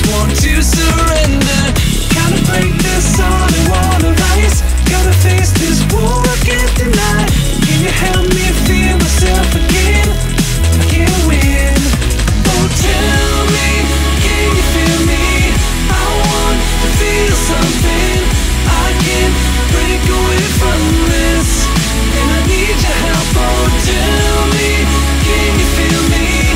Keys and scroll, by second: 1.9 ctrl+z, 2.8 ctrl+z, 7.1 scroll down 1, 7.3 ctrl+z, 10.1-10.5 scroll down 1, 10.5 ctrl+z, 11.5 scroll down 1, 13.0 x, 13.1 ctrl+z, 13.7 ctrl+z, 14.0 ctrl+z, 14.3 scroll up 1, 18.6 x, 19.3 x, 21.3 ctrl+z, 21.5 ctrl+z.